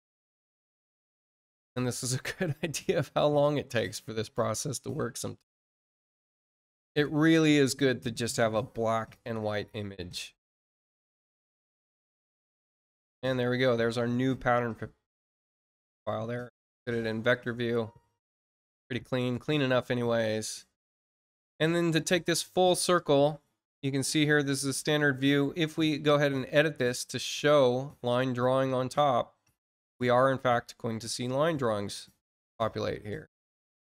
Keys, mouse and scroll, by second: 15.1 click, 15.8 click, 17.3-20.7 drag, 21.7 click, 26.1 click, 28.1 click, 29.9 click, 33.4 click.